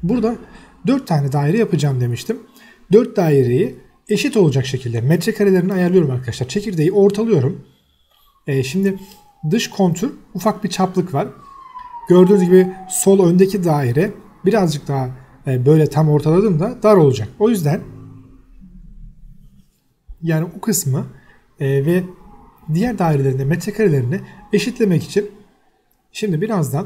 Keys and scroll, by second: 2.9 Escape, 3.0 space, 4.8 Escape, 5.1-6.0 typing, 8.3 Escape, 8.4 e, 8.5 space, 8.8 Escape, 9.3 m, 9.4 space, 11.2 Escape, 12.0 space, 12.7 Escape, 14.2 c, 14.5 space, 15.1 1, 15.6 Return, 15.9 Escape, 16.5 1, 16.9 Return, 17.1 Escape, 17.4 f, 17.5 space, 19.9 Escape, 20.1 e, 20.2 space, 20.5 Escape, 21.0 space, 24.4 space, 24.6 Escape, 25.2 o, 25.5 space.